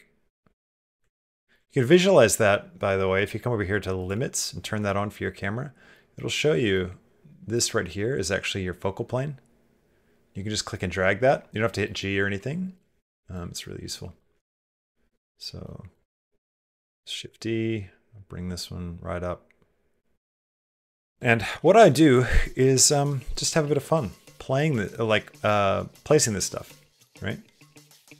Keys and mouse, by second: 0.4 shift+middle click, 1.0 ctrl+middle click, 4.7-6.6 middle drag, 11.9 click, 14.0 shift+middle click, 15.1 shift+click, 15.4 click, 16.2 shift+d, 24.6 middle click, 25.0 g, 26.4 g, 26.8 s.